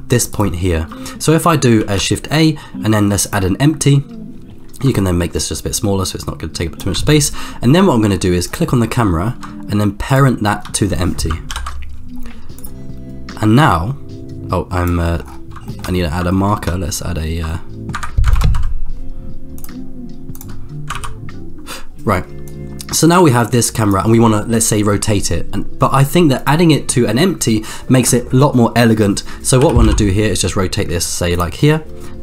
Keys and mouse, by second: 0.3 shift+right click, 1.8 shift+a, 5.0-7.0 shift+drag, 8.4 click, 11.5 ctrl+p, 13.6-15.1 drag, 15.1 middle click, 15.6 shift+middle click, 16.3 shift+middle click, 17.5 shift+middle click, 17.9 Escape, 18.5 ctrl+KP_0, 19.5-20.7 drag, 21.1 ctrl+b, 22.5-24.1 drag, 29.6 r.